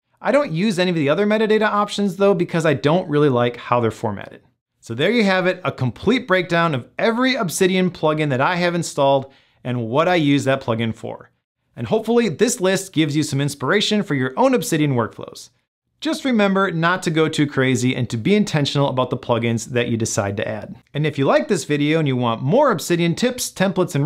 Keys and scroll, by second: 2.8 Return.